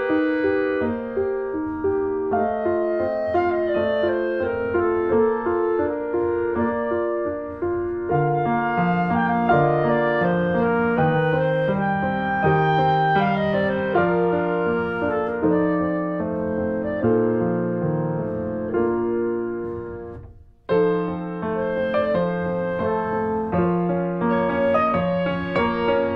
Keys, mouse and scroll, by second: 0.3 ctrl+z, 1.0 click, 1.8 ctrl+z, 2.1-4.5 drag, 4.5 scroll down 1, 4.6 shift+middle click, 4.7 scroll up 1, 4.8 shift+middle click, 5.4-7.2 ctrl+drag, 7.2 ctrl+z, 7.2 ctrl+z, 7.8 click, 7.9 middle click, 8.2-10.0 drag, 10.0 scroll down 2, 10.1 middle click, 11.0 scroll up 1, 11.3 middle click, 11.7 scroll up 1, 11.8-13.0 shift+middle drag, 13.0 scroll down 2, 13.2 middle click, 13.8 click, 14.2 click, 14.3 scroll up 1, 14.4 shift+middle click, 15.0 click, 15.4 middle click, 15.7 shift+click, 16.5 shift+middle click, 16.7 scroll up 1, 17.0-18.2 drag, 18.2 shift+middle click, 18.4 scroll up 1, 18.5 middle click, 18.7 click, 19.4 shift+middle click, 19.8 click, 20.6 shift+middle click, 20.9 click, 21.6 scroll down 1, 21.7 shift+middle click, 22.3-23.4 drag, 23.4 scroll down 2, 23.5 shift+middle click, 24.2 click, 24.5 scroll up 2, 24.6 ctrl+z, 24.8 shift+click, 25.3 shift+middle click, 25.7-26.1 drag.